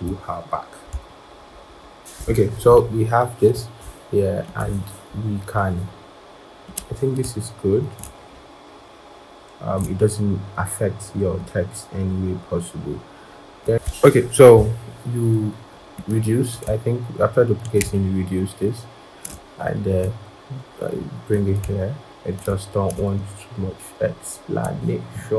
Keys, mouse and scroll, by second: 1.2 shift+Down, 1.3 shift+Down, 1.6 shift+Down, 1.7 shift+Down, 1.9 shift+Down, 2.4 shift+Down, 2.6-3.8 scroll down 1, 7.8 shift+click, 17.8 shift+click, 22.2 shift+click.